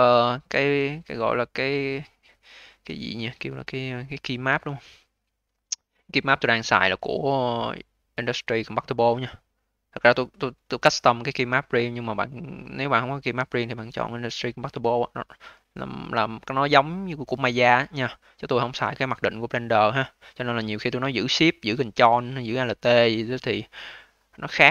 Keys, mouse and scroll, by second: 0.2 alt+middle click, 0.6-2.1 alt+drag, 2.1-3.7 alt+middle drag, 3.7-6.8 drag, 21.6 alt+click, 22.5 alt+middle click, 23.0 alt+click, 23.9-24.7 scroll up 2.